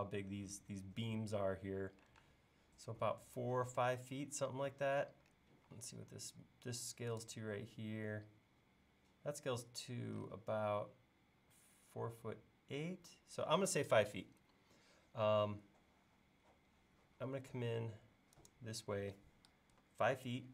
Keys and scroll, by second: 2.2 space, 5.7 l, 13.6 space, 17.3 l.